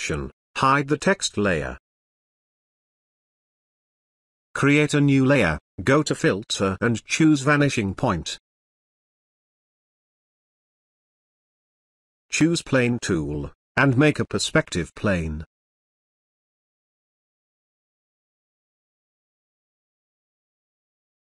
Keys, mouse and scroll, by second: 4.9 click, 11.3-12.9 drag, 18.8 click.